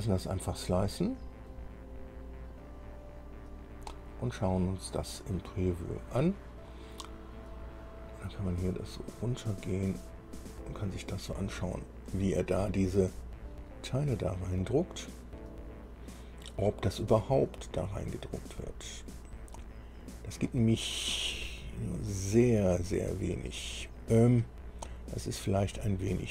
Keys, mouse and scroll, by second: 0.7 click, 4.7 click, 7.6-7.9 scroll up 1, 9.0-11.1 drag, 11.4-12.0 scroll up 1, 12.2 scroll up 2, 12.7-15.4 right drag, 17.3-20.8 drag, 21.3-24.4 right drag, 24.7-25.5 scroll up 2, 25.8-26.3 right drag.